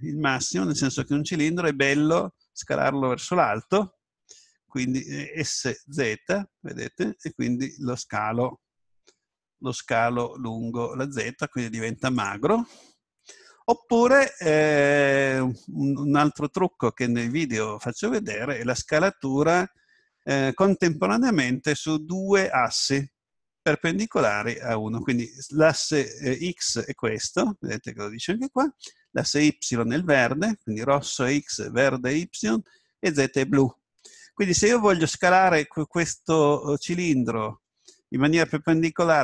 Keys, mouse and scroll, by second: 1.1 right click, 5.6 s, 12.3-14.3 drag.